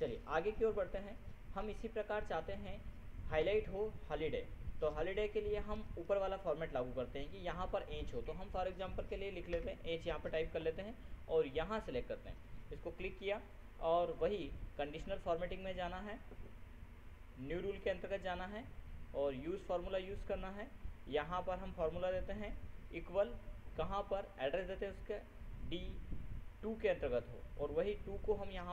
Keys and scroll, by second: 8.6 ctrl+h, 10.1 ctrl+Return, 23.4 ctrl++.